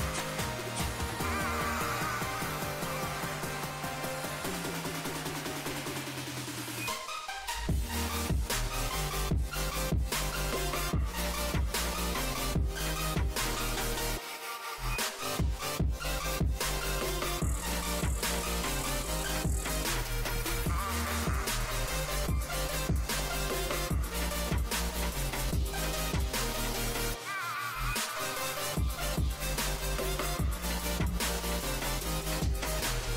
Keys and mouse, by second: 1.9-8.6 drag, 8.6 right click, 9.1-11.0 middle drag, 11.0-13.3 drag, 18.9 ctrl+a, 22.4 Tab, 23.2 z, 25.1 click, 26.8 z, 27.5 Tab, 29.0 Tab, 31.6 ctrl+r.